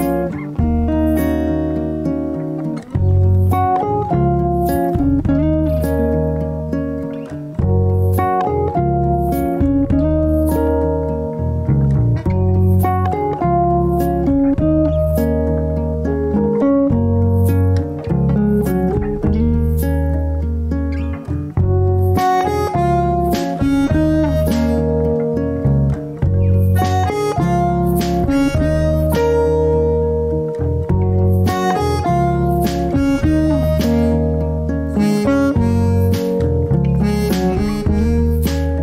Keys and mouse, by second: 2.4 Tab, 2.8 1, 3.2 click, 3.7 g, 12.7-13.1 shift+middle drag, 23.3-26.2 drag, 26.2-26.7 middle drag, 27.4 Tab, 28.0 middle click, 29.1-30.1 drag, 30.5 ctrl+r, 31.6 Tab, 32.7 ctrl+r, 36.7-38.0 middle drag.